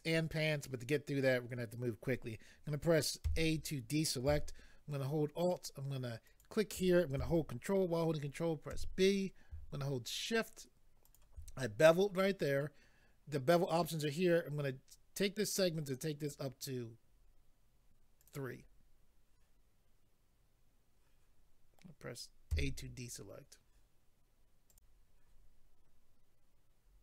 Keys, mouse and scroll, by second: 3.2 a, 6.3 alt+click, 8.7 ctrl+b, 11.0 shift+click, 16.2 click, 17.5 click, 18.2 click, 18.3 click, 22.5 a, 24.7 click, 26.8-27.0 scroll down 1.